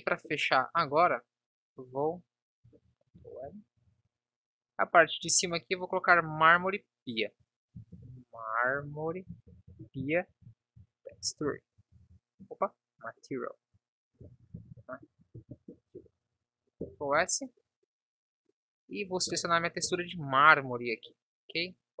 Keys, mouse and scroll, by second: 3.3 ctrl+l, 12.2 ctrl+s, 14.5 BackSpace, 16.2 ctrl+s, 19.7-22.0 drag.